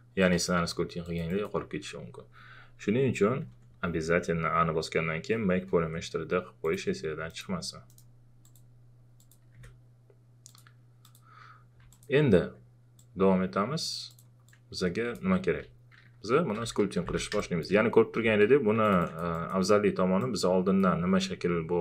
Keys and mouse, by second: 0.2 click, 3.4-4.0 typing, 6.6 click, 7.3 right click, 8.4 click, 9.5 click, 10.5-16.4 drag, 16.1-18.2 typing, 17.4 click, 18.8-21.8 alt+drag.